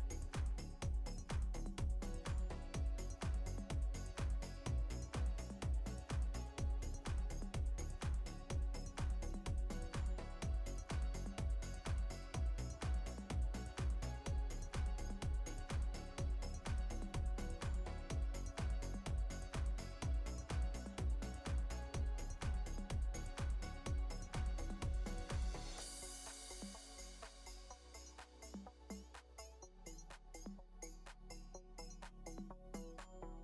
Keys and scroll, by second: 5.0 space, 12.6 space, 26.0 ctrl+z, 30.1 ctrl+z, 31.4 space, 32.2 space.